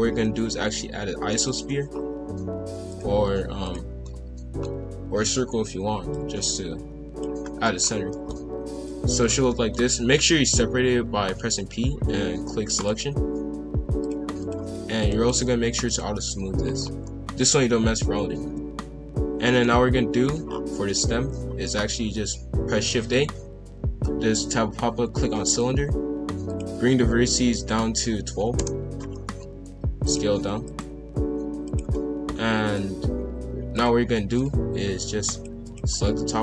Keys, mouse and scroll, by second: 1.9 scroll down 2, 2.2 g, 3.2 s, 4.0-6.1 middle drag, 6.1 click, 7.4-8.1 scroll up 2, 7.4 middle click, 8.1 middle click, 8.8 click, 9.4-10.7 middle drag, 10.7 p, 14.0-15.1 drag, 15.3-16.8 right drag, 16.8 scroll down 1, 17.0-18.2 middle drag, 18.2 KP_5, 18.4 KP_1, 18.8-19.4 scroll up 1, 19.4-20.4 shift+middle drag, 20.4-20.9 scroll down 5, 21.0 shift+a, 26.4-29.4 drag, 29.4 g, 30.3 s, 31.1 g, 32.6-35.2 drag, 35.6 alt+click.